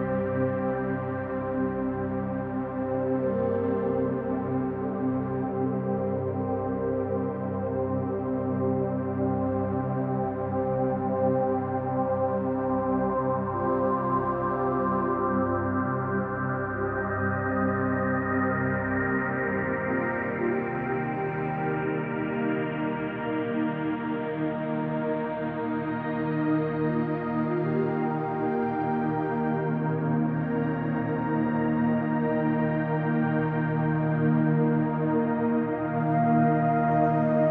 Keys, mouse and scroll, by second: 1.6-2.4 typing, 1.9 click, 2.9-4.2 drag, 3.9-4.7 typing, 5.0-5.7 drag, 8.3 click, 10.2 click, 10.5 click, 11.2 click, 12.1 click, 12.8 click, 16.5 click, 17.6-20.0 drag, 20.1 Return, 21.3 click, 21.5 Return, 22.4 click, 22.6 Return, 23.8 click, 24.1 Return, 25.6 click, 26.6 click, 26.8 Return, 29.6 click, 30.6 click, 31.6 click, 32.5-34.3 drag, 33.9 x, 34.0 Caps_Lock, 34.9-36.5 typing.